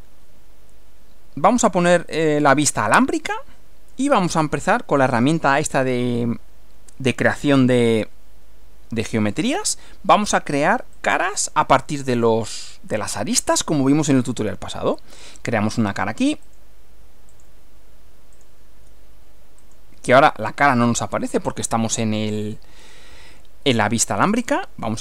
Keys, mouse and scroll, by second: 2.1 click, 3.1 click, 5.2 click, 10.9 click, 12.3-13.7 middle drag, 15.3 click, 16.5 ctrl+click, 17.3 ctrl+click, 18.3 ctrl+click, 19.6 click, 21.7-22.7 middle drag, 24.5 click.